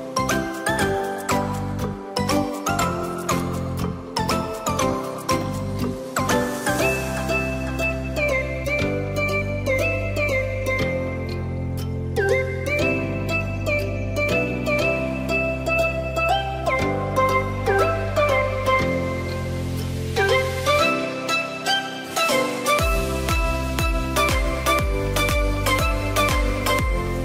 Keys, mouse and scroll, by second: 1.1 shift+click, 3.6 ctrl+p, 5.5 click, 6.1 click, 6.8 click, 7.6 click, 10.3 click, 10.8-12.5 scroll down 1, 13.5 click, 14.0 click, 15.0 drag, 15.5 click, 18.2 click, 19.3 click, 20.0 click, 23.2 click.